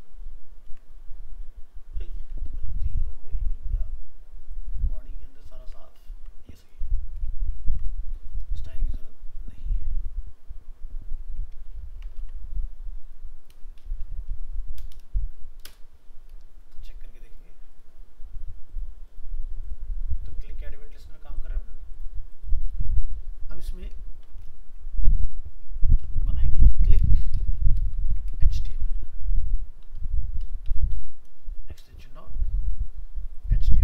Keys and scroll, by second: 0.6 ctrl+v, 2.3 ctrl+z, 5.6 ctrl+v, 11.5 ctrl+s, 14.1 alt+Up, 24.1 alt+f, 24.2 alt+秄, 28.0 shift+Left.